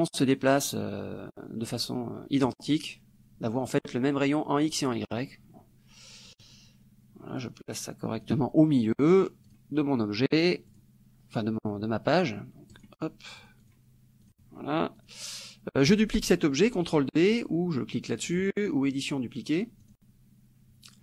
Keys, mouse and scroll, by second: 6.4 click, 7.6 click, 9.6 click, 10.7 click, 12.8 click, 13.4 click, 14.4 click, 15.0 click, 18.3 click, 19.9 click.